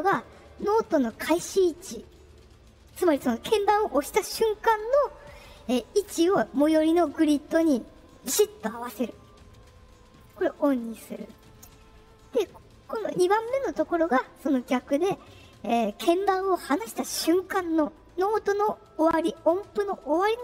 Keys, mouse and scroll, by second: 10.1 click, 11.2 right click.